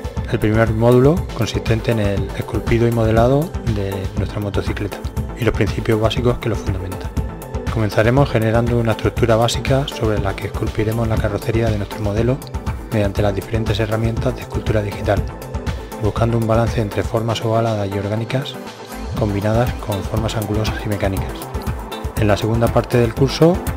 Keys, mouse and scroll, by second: 0.2 KP_3, 0.7 click, 2.1-3.4 middle drag, 2.5 g, 4.8 ctrl+d, 4.9 click, 6.0 ctrl+d, 6.3 click, 6.6 ctrl+z, 7.3 click, 7.9 click, 8.4 middle click, 8.8 right click, 9.4 click, 9.7 middle click, 10.1 KP_3, 10.3 Tab, 11.2 e, 13.2 e, 13.9-15.3 drag, 14.1 f, 14.4 f, 15.4-15.8 drag, 15.7 f, 16.0 f, 16.1-16.7 drag, 16.9-17.2 middle drag, 17.2-17.6 drag, 17.9 middle click, 18.1-18.5 drag, 18.5-19.1 middle drag, 19.0 g, 19.1 f, 19.3-20.0 drag, 20.0 f, 22.3-23.7 middle drag.